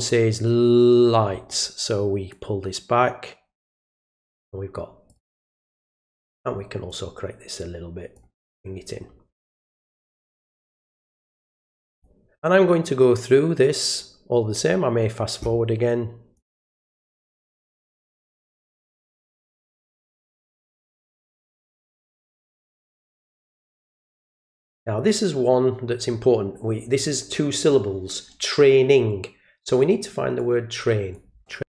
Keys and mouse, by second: 2.3-4.3 drag, 5.1 click, 6.3 click, 7.6 click, 10.1-12.0 drag, 16.3 click, 16.8 click, 17.4 click, 18.0 click, 18.5 click, 19.2 click, 19.8 click, 21.0 click, 21.9 click, 22.6 click, 23.5 click, 24.0 click, 30.4 click.